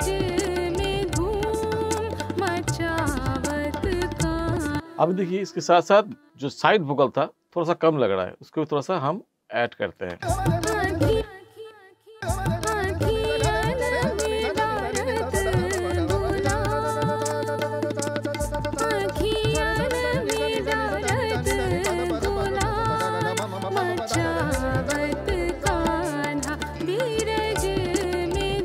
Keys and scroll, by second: 4.7 space, 10.1 space.